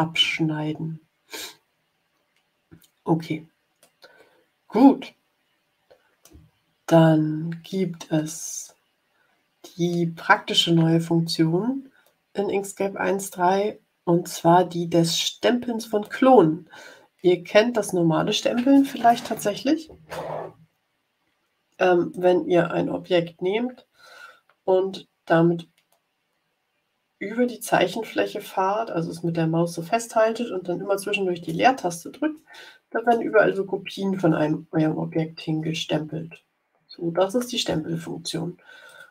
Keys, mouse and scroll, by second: 0.3-0.8 ctrl+scroll down 4, 3.7-6.4 drag, 7.2 ctrl+scroll up 2, 8.2 middle click, 9.2 click, 22.0-37.5 drag, 31.4 space, 32.2 space, 33.0 space, 34.0 space, 35.5 space, 38.8 click.